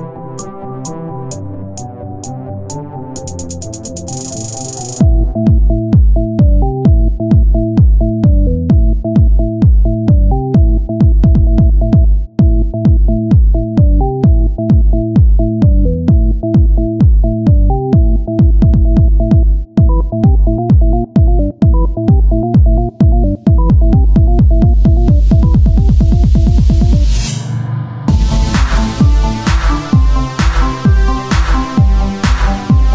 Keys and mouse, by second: 5.6 ctrl+Tab, 6.1 z, 8.7 z, 9.5 s, 12.3 click, 12.3 z, 15.5 Tab, 15.5-16.5 drag, 20.2 Tab, 20.5 z, 21.0-22.0 drag, 21.6 c, 22.1 z, 23.7 click, 24.5 Tab, 26.8-31.3 drag, 31.3 Tab, 32.5 Tab.